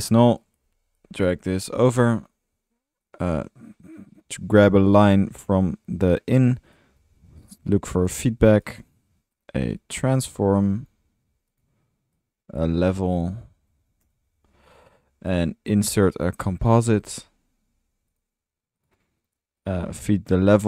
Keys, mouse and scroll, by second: 0.1 Delete, 2.2-2.5 drag, 2.8 typing, 6.6 Tab, 6.7-8.1 typing, 9.7-10.7 typing, 12.7 Tab, 13.1-14.3 typing, 15.8-16.3 right drag, 16.1 click, 16.1-17.0 typing, 18.1 Return, 20.0-20.6 typing.